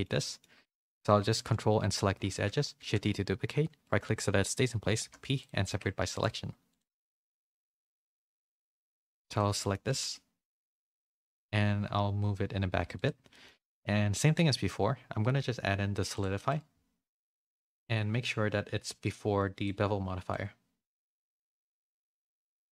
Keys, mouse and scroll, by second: 0.3 shift+middle click, 0.6 middle click, 2.1 z, 2.7 shift+d, 5.0 p, 5.6 Tab, 8.9 Tab, 9.2 a, 9.5 middle click, 9.8 e, 13.4 middle click, 13.6 middle click, 14.2 Tab, 16.1-17.3 drag, 19.1 click, 20.2-21.5 drag, 21.9 middle click, 22.3 shift+middle click, 22.6 shift+middle click.